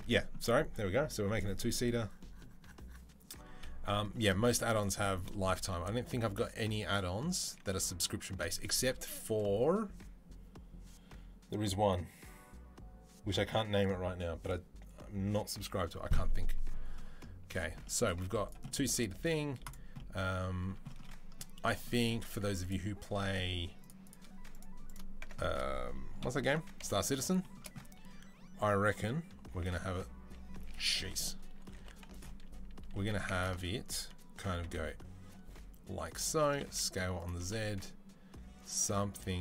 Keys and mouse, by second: 4.2 z, 17.9 z, 19.0 z, 21.9 Tab, 22.3 Tab, 22.4 click, 22.6-23.7 middle drag, 23.7-24.4 drag, 24.4-29.1 middle drag, 25.0 Tab, 26.0 KP_3, 26.3 KP_1, 26.6 KP_3, 29.4 e, 30.7 ctrl+z, 31.6 2, 32.0 alt+click, 32.8 1, 33.4-39.4 middle drag, 34.4 e, 36.2 s, 37.2 g.